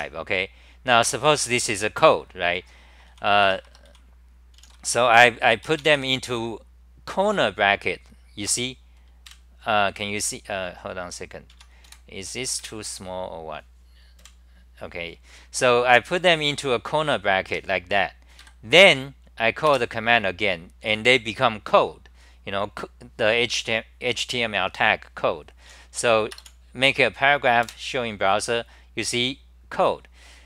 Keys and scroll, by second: 3.4 Return, 3.9 c, 4.6 n, 5.2 n, 9.3 super+=, 11.5 Home, 11.9 super+w, 12.7 shift+super+t, 14.2 super+=, 15.6-16.0 scroll down 5, 17.5-18.0 scroll down 1, 17.5 2, 18.4 ctrl+g, 27.7 super+r.